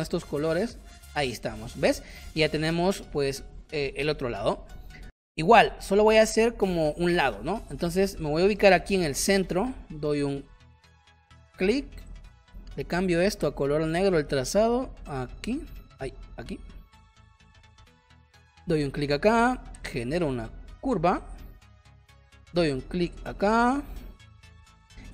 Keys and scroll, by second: 1.0 v, 2.1 space, 5.2 p, 8.5 space, 10.8 shift+x, 23.5 space, 24.4 space.